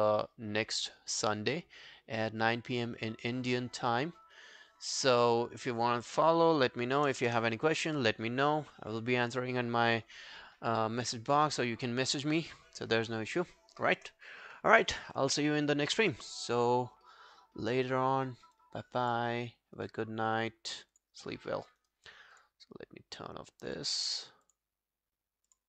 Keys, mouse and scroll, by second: 7.1 BackSpace, 7.2 2, 7.4 Return, 8.0 2, 17.9 right click, 21.8 right click.